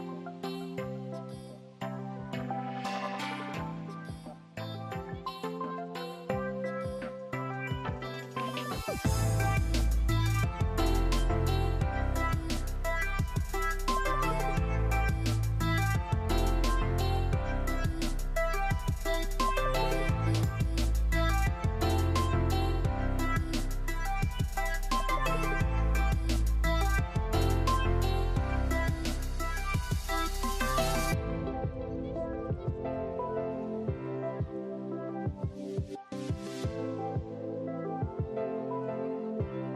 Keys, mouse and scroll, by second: 0.4 scroll up 1, 0.8 click, 1.3 Tab, 1.8 scroll up 1, 2.5 click, 3.3 alt+click, 5.3 click, 7.6 ctrl+r, 9.5 click, 9.7-10.9 middle drag, 10.7 Tab, 10.9 click, 11.3-14.4 middle drag, 12.0-12.4 scroll down 2, 13.6 scroll down 1, 14.1 scroll up 1, 14.4 click, 14.7 Tab, 15.2 ctrl+r, 17.1 click, 18.0 Tab, 18.3-20.9 middle drag, 19.1 Tab, 19.9 ctrl+r, 20.9 click, 21.3-26.2 middle drag, 21.6 scroll down 2, 22.2 scroll up 1, 22.4 Tab, 23.2-24.4 scroll up 1, 24.4 Tab, 24.9 ctrl+r, 26.2 click, 26.7 ctrl+r, 27.5 click, 27.9 ctrl+r, 29.0 click, 29.4-31.5 shift+middle drag, 29.8-30.3 scroll up 1, 30.3 ctrl+r, 31.7 click, 32.0 Tab, 32.2 scroll down 1, 32.5 click, 32.8-34.4 middle drag, 34.0 scroll up 1, 34.2 Tab, 34.4 click, 34.9 ctrl+r, 37.0 click, 37.4 Tab, 37.6 click, 37.8 scroll down 1, 38.0-39.3 middle drag, 38.6 scroll down 1, 39.3 click.